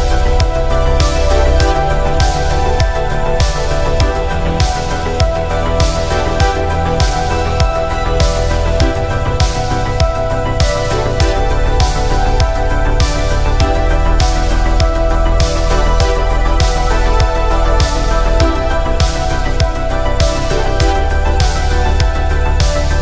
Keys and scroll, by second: 4.5 ctrl+z, 4.9 ctrl+z.